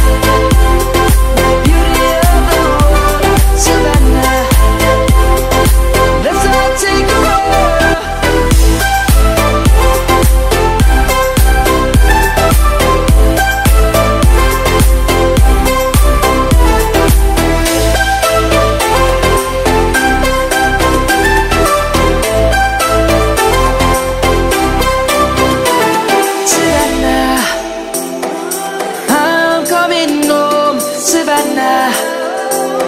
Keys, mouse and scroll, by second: 3.2 click, 5.1 F10, 6.3-6.6 scroll down 1, 7.7 KP_1, 9.1 scroll down 1, 10.0 click, 10.8 KP_5, 11.1 KP_0, 11.6 Return, 11.9 scroll up 1, 12.9 click, 14.6-15.5 typing, 17.2 click, 18.2-19.5 typing, 20.4 scroll down 1, 21.4 click, 22.0 right click, 22.1 F10, 22.4 click, 23.6 right click, 23.8 click, 24.3 Delete, 24.7-25.8 right drag, 25.1-26.7 typing, 27.0 Return, 28.4-31.3 typing, 31.6 right click.